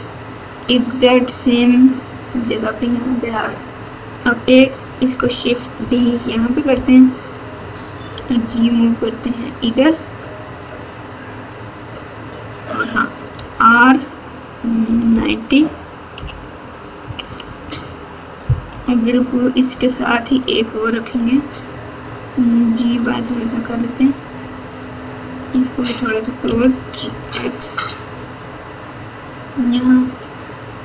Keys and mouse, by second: 5.8 shift+d, 8.1 g, 13.3 r, 17.0 KP_2, 17.2 KP_2, 17.6 KP_2, 18.7 KP_7, 21.1 g, 25.9 click, 26.4 g, 30.0 middle click.